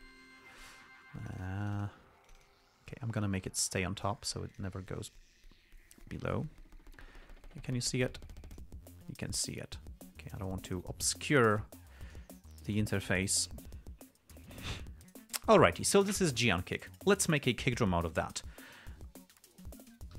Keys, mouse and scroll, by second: 1.5 click, 2.6 click, 3.5 right click, 4.9 click, 5.5-9.1 drag, 10.9 click, 11.9 click, 19.6 k.